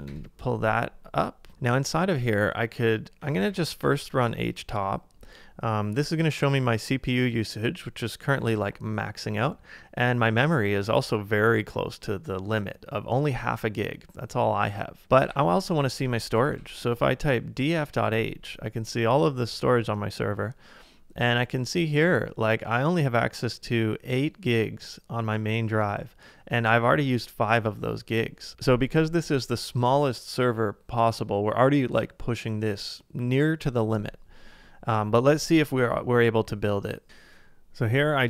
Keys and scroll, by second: 0.1 shift+Return, 2.2 typing, 3.6-4.3 typing, 15.8-17.0 typing, 17.7 Return.